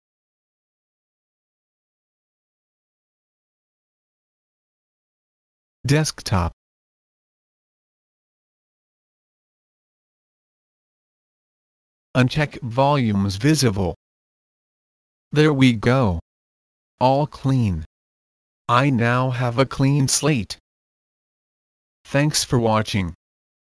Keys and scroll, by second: 0.0-1.0 typing, 1.8 Return, 5.7-7.7 typing, 8.1 Return.